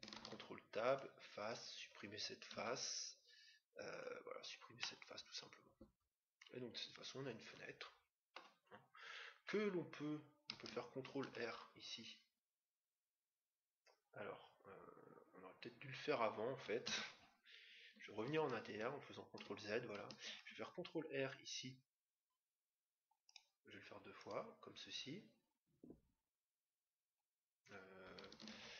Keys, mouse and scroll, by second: 0.1 ctrl+Tab, 1.4-3.0 right drag, 2.5 x, 4.7-6.4 middle drag, 8.7-9.3 scroll up 1, 9.3-10.6 middle drag, 10.6-11.2 scroll down 1, 11.1 ctrl+r, 18.6 ctrl+z, 20.3 ctrl+r, 28.5 ctrl+z.